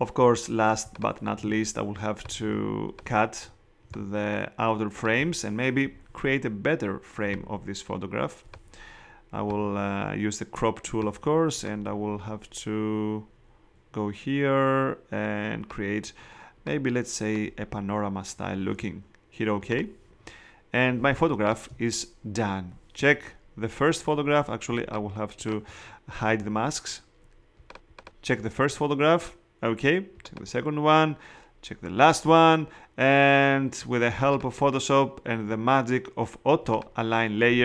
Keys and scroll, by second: 21.1 space.